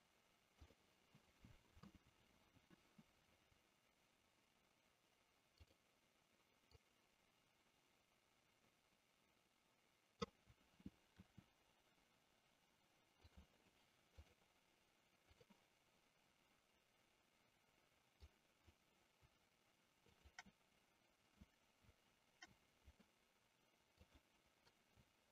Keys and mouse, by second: 5.4 click, 6.9-10.4 drag, 11.3 r, 14.2-15.6 drag, 18.2 click, 20.1 shift+click, 23.9 click.